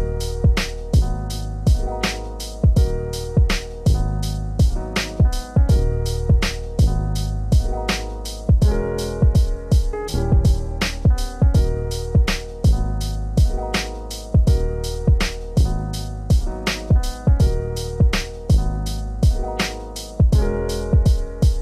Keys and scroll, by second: 6.6 shift+F6, 11.0 ctrl+z, 11.9 ctrl+BackSpace, 13.5 ctrl+d, 16.6 ctrl+space.